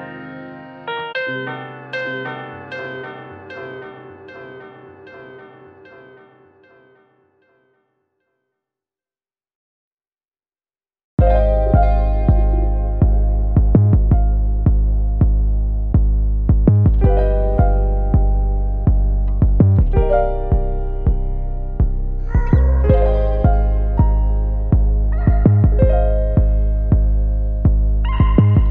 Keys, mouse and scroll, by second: 0.7 x, 1.0 click, 1.5 e, 2.4 click, 2.6 shift+click, 2.7 f, 3.5 Tab, 3.7 click, 3.8-4.1 scroll down 1, 4.8 g, 5.6 scroll down 1, 6.5 scroll up 1, 6.8 `, 7.3 scroll up 1, 7.9 `, 8.4 click, 8.9 `, 9.5-9.9 scroll down 1, 10.1 `, 10.3 1, 10.5 `, 11.4 click, 11.8-12.3 scroll up 1, 12.3 click, 12.7 shift+click, 13.1 g, 14.4 Tab, 14.9 alt+a, 15.1-15.7 scroll down 1, 15.7 alt+h, 16.3 KP_Divide, 16.5 alt+a, 17.1 scroll up 1, 18.0 click, 18.7 `, 19.3 scroll down 1, 19.6 `, 20.1 Tab, 20.6 click, 21.5 KP_Divide, 21.9 scroll up 1, 22.0 `, 23.1 click, 23.4 `, 24.9 3, 25.1 click, 25.3 `, 25.9-26.5 scroll down 1, 27.1 ctrl+click, 27.3 `, 27.9 ctrl+click, 28.4 shift+click, 28.6 `.